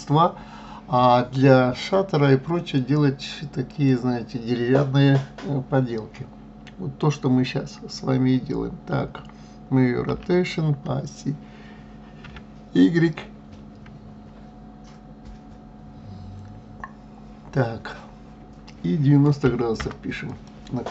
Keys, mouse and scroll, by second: 1.9-3.7 middle drag, 3.7 click, 10.1 r.